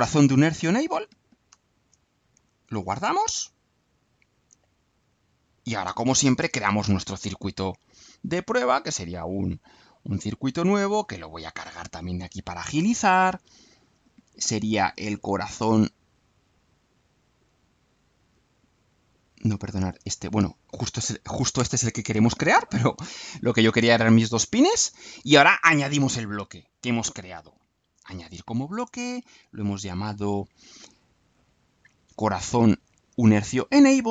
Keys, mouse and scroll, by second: 1.5-2.1 alt+drag, 2.3 alt+click, 3.3 click, 8.2 click, 9.9-11.2 drag, 18.3 click, 20.7-21.3 drag, 21.5 Delete, 27.4 click, 32.9 click.